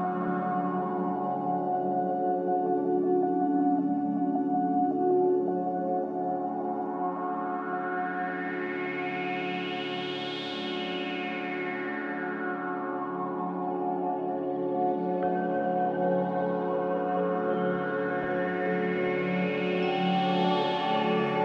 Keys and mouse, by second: 2.7-3.4 middle drag, 7.0-7.4 shift+middle drag, 8.6 click, 9.2 click, 9.7 Tab, 11.0 click, 11.7 Tab, 12.1 Tab, 13.0 F4, 14.6-15.6 drag, 17.0-18.9 drag, 20.4-21.2 middle drag.